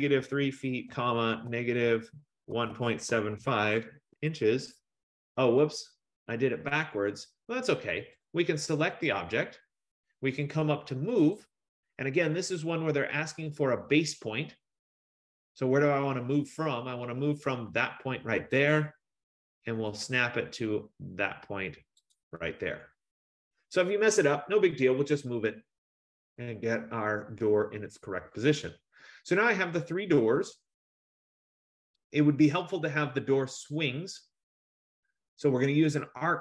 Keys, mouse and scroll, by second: 0.0-4.8 typing, 7.3-8.4 scroll, 8.4 click, 9.2 click, 11.4 click, 18.9 click, 22.3 click, 25.1 middle click, 27.0 middle click.